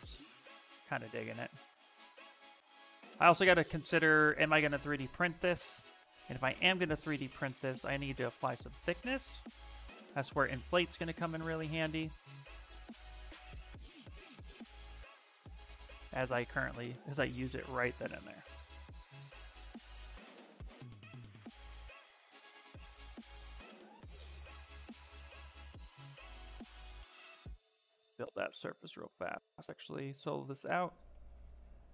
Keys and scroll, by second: 0.3 s, 1.3 s, 5.1 s, 6.5 b, 7.0 n, 8.3 s, 17.6 ctrl+z.